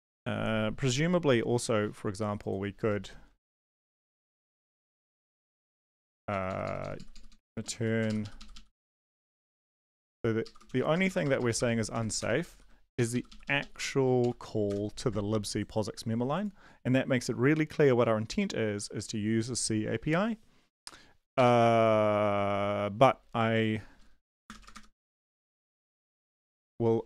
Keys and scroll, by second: 3.3 Up, 3.5 ctrl+Right, 3.7 ctrl+Right, 4.1 ctrl+shift+Left, 4.3 ctrl+shift+Left, 4.8 ctrl+shift+Left, 4.8 ctrl+x, 5.0 Up, 5.3 Home, 5.4 ctrl+v, 5.7 space, 5.9 Down, 6.1-7.4 Down, 8.1 shift+Up, 8.2 shift+Up, 8.4 shift+Up, 8.7 shift+Up, 8.7 shift+Right, 8.9 shift+Up, 9.0 shift+Right, 9.3 shift+Down, 9.6 shift+Up, 9.8 shift+Right, 10.4 ctrl+shift+Left, 10.7 ctrl+x, 10.9 BackSpace, 11.1 BackSpace, 11.2 BackSpace, 11.4 BackSpace, 11.9 Down, 12.2 Return, 12.5 ctrl+v, 12.9 Up, 13.1 Up, 13.3 Up, 14.7 Return, 14.7 ;, 18.6 ctrl+s, 21.3 BackSpace, 22.2 ctrl+s, 24.2 Down, 24.4 Return, 24.6 \, 24.7 Return, 25.3 Up, 25.5 Up, 25.8 End, 26.0 BackSpace, 26.5 Return.